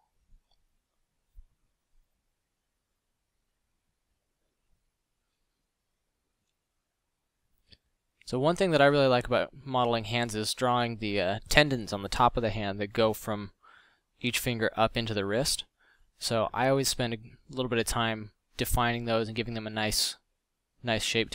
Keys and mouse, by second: 1.3-1.9 middle drag, 1.9 f, 9.5 middle click, 17.1 click.